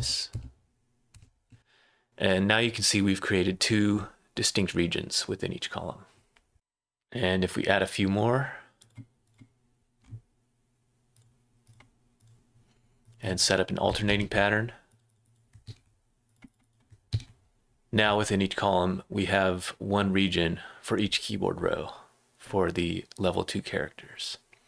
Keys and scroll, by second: 0.3 Up, 1.1 Up, 6.5 Return, 6.5 space, 6.5 BackSpace, 14.0 c, 15.6 v, 17.1 v.